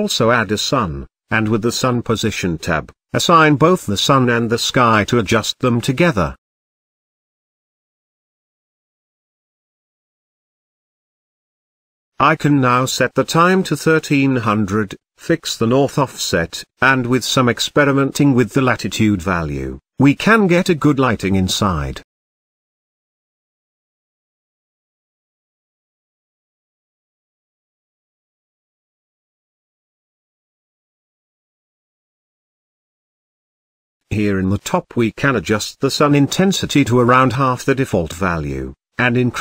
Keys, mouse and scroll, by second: 4.5 click, 5.3-6.0 scroll down 2, 6.1-7.3 scroll down 5, 7.3 click, 7.8-8.4 scroll down 3, 8.4-9.0 scroll down 4, 9.0-11.9 drag, 11.9-12.7 scroll down 10, 13.3-15.2 drag, 17.2-18.9 drag, 20.1-22.0 drag, 23.1-24.9 drag, 27.8-29.7 drag, 33.1-36.1 scroll up 18, 36.1-37.9 drag, 38.7-39.4 drag.